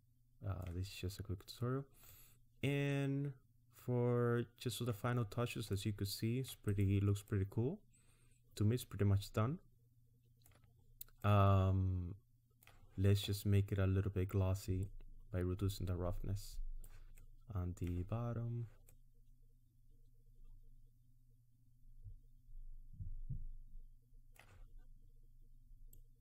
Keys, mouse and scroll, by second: 2.1 middle click, 5.2-5.7 scroll down 2, 5.7 middle click, 6.7 click, 7.3 middle click, 10.7 scroll up 2, 11.2 middle click, 14.9 click, 17.2 middle click, 18.9 middle click, 25.9 click.